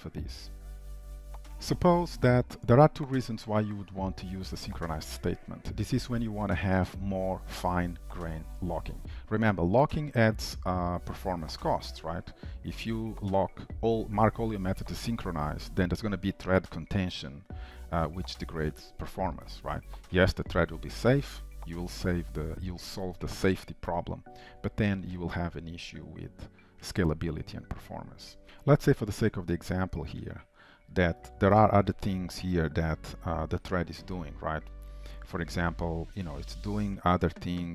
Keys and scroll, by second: 28.4 ctrl+s, 31.5 shift+Return, 34.2 Return.